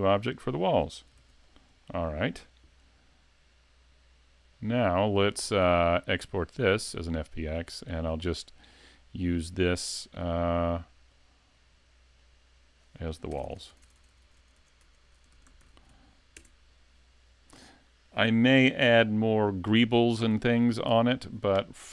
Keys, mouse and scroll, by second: 0.6 shift+middle click, 1.2 s, 4.6 click.